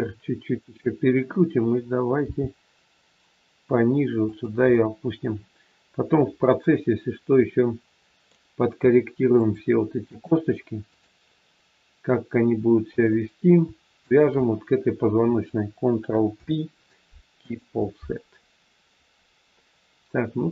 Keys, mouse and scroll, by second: 2.2 g, 4.8 middle click, 9.4 shift+click, 13.1 middle click, 14.0 shift+click, 16.4 ctrl+p.